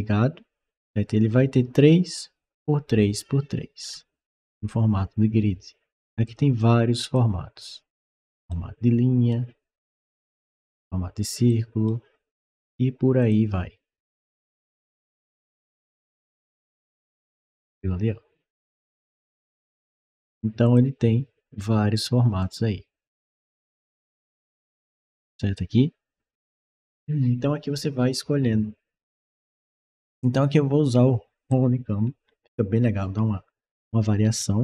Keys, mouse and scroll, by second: 3.6 scroll down 1, 3.7 middle click, 3.8 middle click, 3.9 typing, 6.1 click, 6.8 click, 8.3 right click, 9.8 click, 10.5 click, 11.3 right click, 13.0 click, 14.1 click, 15.3 click, 16.1 click, 18.6 middle click, 18.6-19.1 scroll down 1, 20.5 click, 22.2 click, 26.1 click, 28.9 click, 31.3-34.6 right drag.